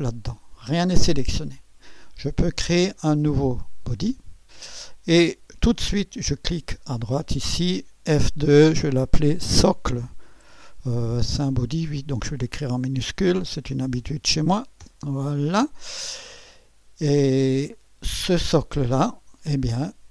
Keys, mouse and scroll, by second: 3.8 click, 7.1 click, 8.1 F2, 10.3 shift+s, 11.7 BackSpace, 11.8 BackSpace, 13.0-15.3 typing.